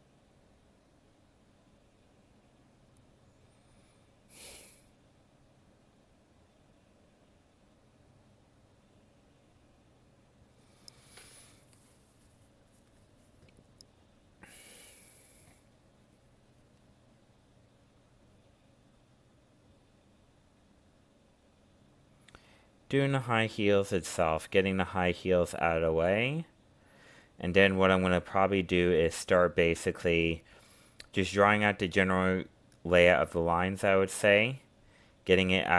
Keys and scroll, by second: 10.4 ctrl+z, 16.9 ctrl+alt+z, 17.7 ctrl+z, 25.6 ctrl+z, 31.4 ctrl+z.